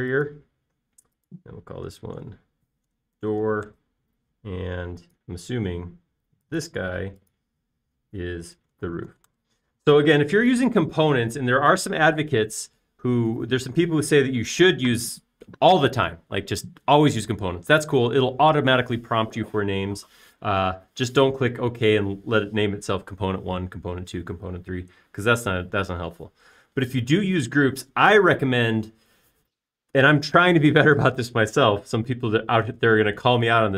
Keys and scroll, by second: 3.7-5.1 typing, 9.8-10.8 typing.